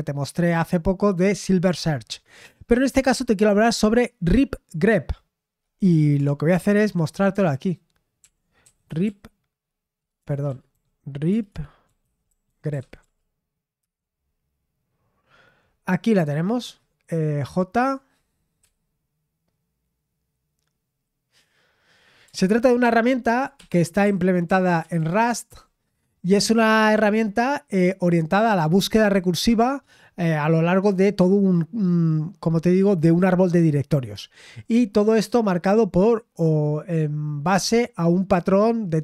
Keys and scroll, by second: 6.7 super+8, 8.2 ctrl+l, 8.4-13.5 typing, 13.8 Return, 16.6 typing, 18.6 typing, 22.8 ctrl+d, 23.6 Escape, 24.0-25.5 typing.